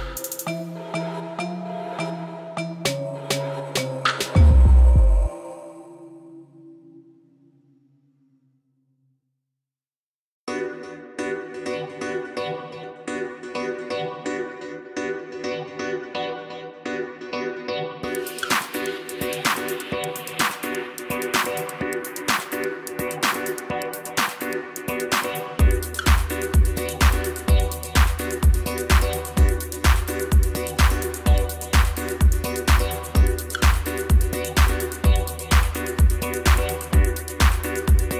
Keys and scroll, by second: 2.9 s, 10.4 e, 20.2 i, 24.0 i, 26.3 i, 33.7 e.